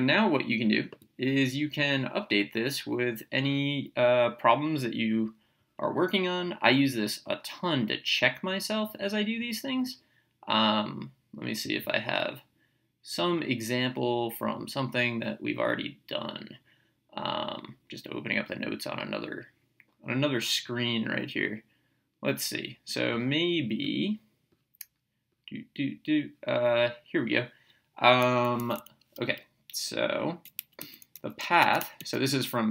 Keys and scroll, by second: 28.6 Up, 30.6 Down, 31.1 Up, 31.4 Right.